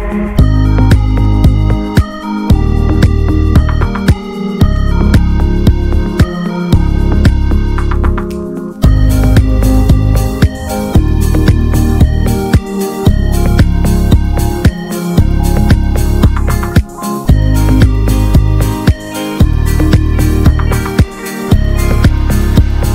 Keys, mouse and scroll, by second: 0.1 l, 1.0 click, 2.4 r, 3.5 click, 4.7 click, 5.3 a, 6.0 click, 7.3 r, 8.4 click, 9.2 s, 10.4 click, 11.8 r, 12.7 s, 14.1 click, 15.2 s, 17.2 click, 19.3 s, 21.5 Tab, 21.7 Tab.